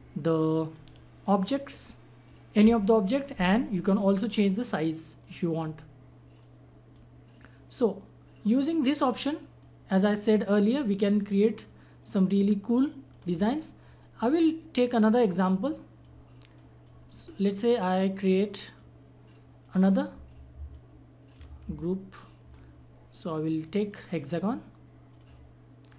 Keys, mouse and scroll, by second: 4.0 click, 4.1-9.6 drag, 15.4-19.6 drag, 20.7-25.9 drag.